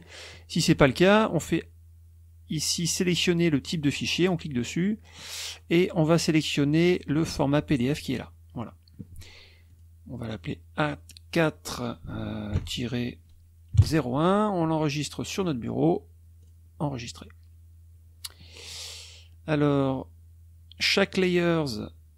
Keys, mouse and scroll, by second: 4.1 click, 5.4-5.7 scroll down 1, 6.2 click, 7.9 click, 9.6 click, 10.2 click, 11.3 click, 13.7 KP_0, 13.8 KP_1, 15.3 click, 16.3 click.